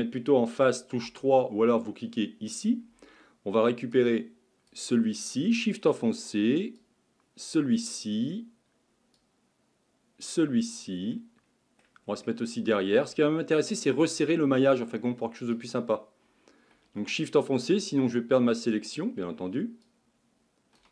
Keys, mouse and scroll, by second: 1.0 3, 3.9 click, 6.8 shift+click, 9.2 shift+click, 10.7-11.2 scroll down 2, 11.2 middle click, 12.1-12.5 scroll down 1, 12.5 shift+middle click, 13.2-13.6 scroll up 4, 13.6-15.5 middle drag, 15.5 click, 18.1 shift+click, 19.9 shift+click.